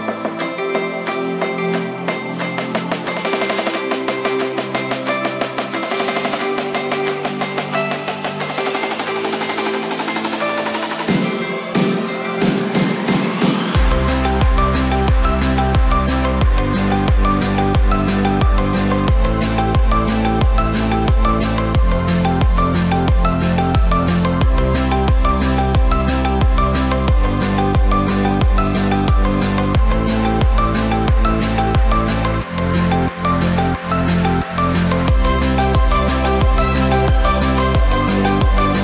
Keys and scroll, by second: 28.6 ctrl+t.